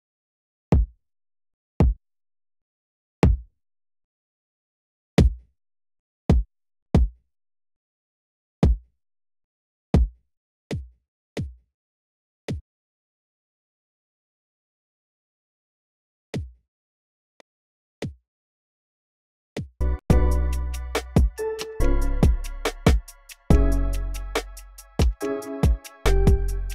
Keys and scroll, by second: 0.0-1.2 typing, 3.0 space, 3.6 space, 5.0-8.4 typing, 10.0 space, 10.0 space, 11.0 space, 11.1 space, 12.3 space, 12.4 space, 16.1 space, 17.1 space, 17.8 space, 19.3-20.4 typing.